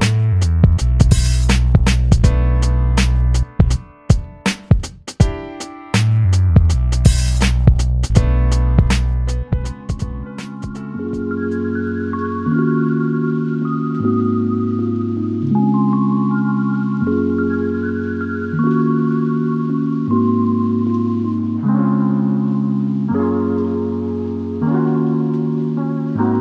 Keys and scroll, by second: 0.0-1.4 typing, 1.6 ctrl+-, 2.1 ctrl+-, 19.8-21.9 typing, 22.1 Return, 23.3 ctrl+=.